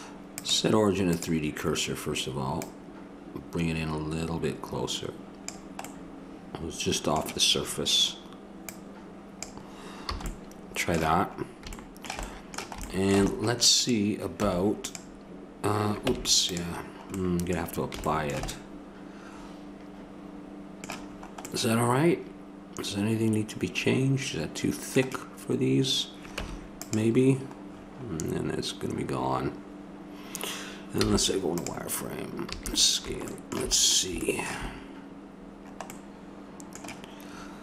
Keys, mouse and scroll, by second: 0.3-4.3 drag, 5.8 middle click, 8.7-10.5 drag, 10.1 a, 12.4-13.6 middle drag, 13.9 right click, 14.4 Tab, 14.4 click, 16.1 Tab, 20.3-21.5 middle drag, 22.3 middle click, 26.9 Tab, 31.0 z, 32.5 a, 33.8 middle click, 34.7 middle click, 36.1-37.6 middle drag.